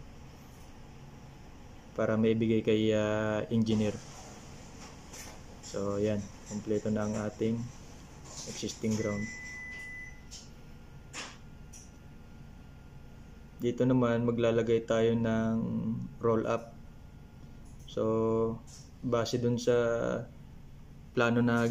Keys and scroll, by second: 0.7 Up, 0.8 Up, 2.0 ctrl+c, 2.1 ctrl+v, 4.6 ctrl+c, 4.7 ctrl+v, 6.7 ctrl+c.